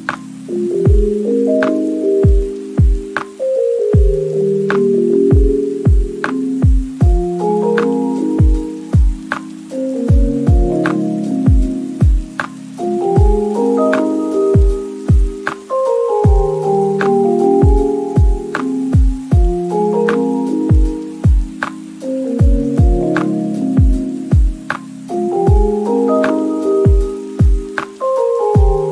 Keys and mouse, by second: 0.3 s, 0.5 z, 0.9 shift+middle click, 1.6 Tab, 2.0 click, 2.4 g, 2.4 z, 3.4 g, 3.4 z, 4.0 ctrl+z, 4.5 alt+shift+click, 4.8 g, 4.8 z, 5.6 o, 6.6 alt+shift+click, 7.0 alt+shift+middle click, 7.4 g, 7.4 z, 7.4 o, 8.0 ctrl+z, 8.1 click, 8.2 g, 9.0 ctrl+alt+shift+z, 9.2 g, 10.0 click, 10.3 Tab, 10.3 shift+click, 10.4-12.0 typing, 11.0 Tab, 11.5 shift+click, 11.7 Tab, 11.8 ctrl+s, 11.8 click, 14.1 shift+middle click, 14.3-16.0 typing, 14.5 Tab, 14.8 shift+click, 15.6 middle click, 15.9 ctrl+z, 16.7 click, 16.8 shift+middle click, 17.3-18.7 typing, 17.5 click, 18.4 drag, 18.4 middle drag, 18.8 click, 19.2 ctrl+s, 20.2-28.9 typing, 20.9 click, 21.3 ctrl+j, 21.5 shift+click, 21.8 click, 22.0 Tab, 22.6 shift+middle click, 23.2 shift+middle click, 23.4 click, 23.9 shift+middle click, 26.4 shift+middle click, 27.4 middle click, 27.9 middle click, 28.1 middle click.